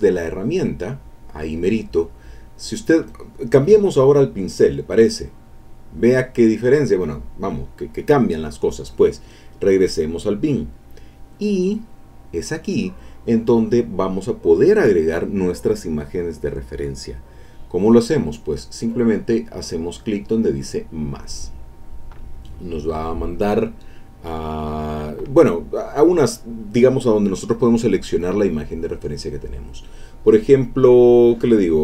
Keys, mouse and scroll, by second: 4.9 click, 10.3 click, 21.0 click, 28.9 click, 31.7 click.